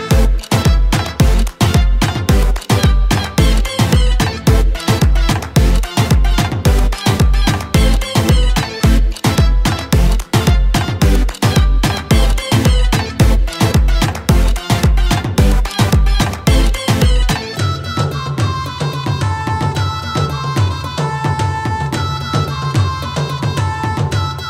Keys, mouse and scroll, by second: 4.7-8.4 shift+drag, 8.4-14.2 alt+drag, 14.2 d, 15.5 click, 16.8 ctrl+z, 18.5-24.4 drag.